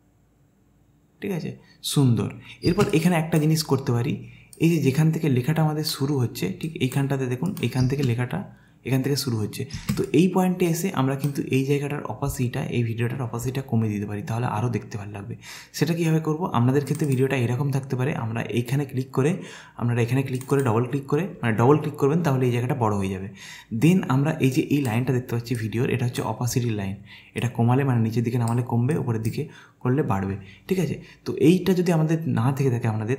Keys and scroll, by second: 2.7 space, 7.8 space.